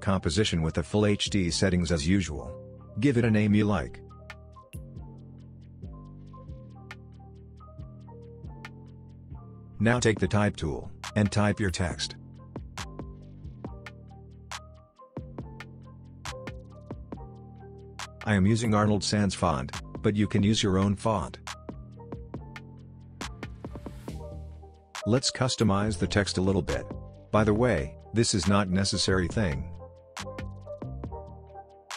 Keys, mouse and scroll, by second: 0.0-3.6 typing, 7.0 click, 10.4 click, 12.3-15.5 typing, 17.1-18.4 drag.